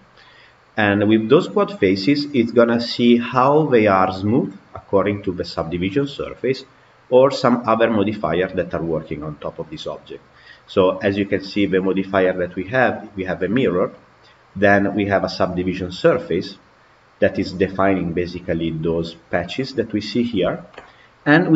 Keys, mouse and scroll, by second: 9.1 click, 11.1 click, 12.9 click.